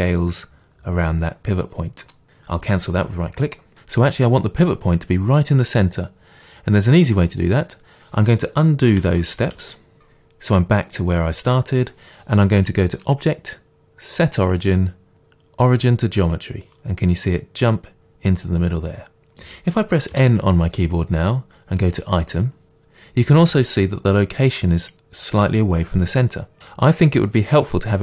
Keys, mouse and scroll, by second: 2.1 right click, 9.2 ctrl+z, 10.0 ctrl+shift+z, 13.0-21.9 drag, 20.2 n.